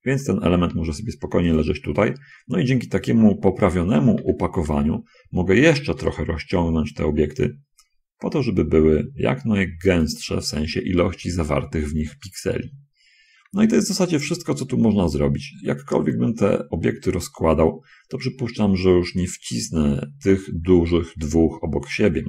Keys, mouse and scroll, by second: 1.7 click, 2.7-4.3 scroll up 2, 4.3 a, 5.0 a, 6.3 s, 15.6 middle click, 16.5-17.5 shift+drag.